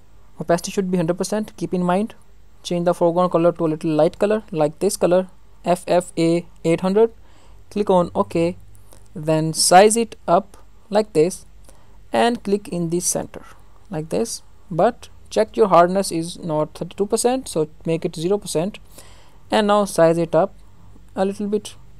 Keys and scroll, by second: 14.7 ctrl+alt+z.